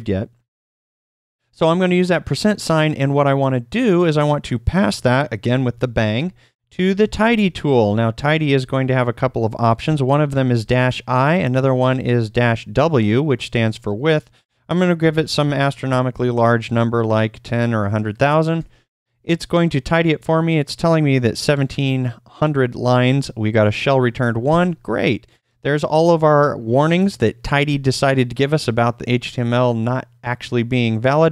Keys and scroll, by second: 5.7-12.6 typing, 13.7 space, 14.7-15.5 typing, 18.5 Return, 18.5 typing.